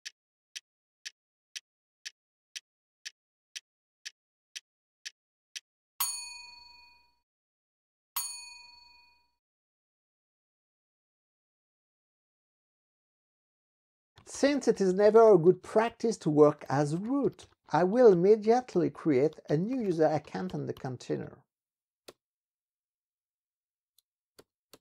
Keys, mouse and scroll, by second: 13.9-21.4 typing, 22.1 Return, 24.4 Return.